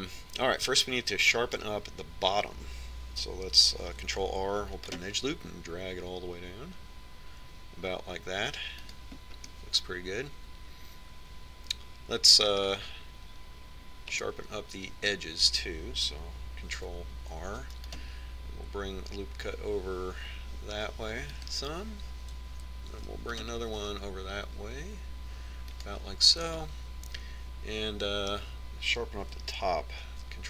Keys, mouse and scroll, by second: 0.9-2.6 middle drag, 5.3 ctrl+r, 10.9-12.7 middle drag, 14.1-17.4 middle drag, 18.3 ctrl+r, 24.5 ctrl+r, 28.0-29.8 middle drag.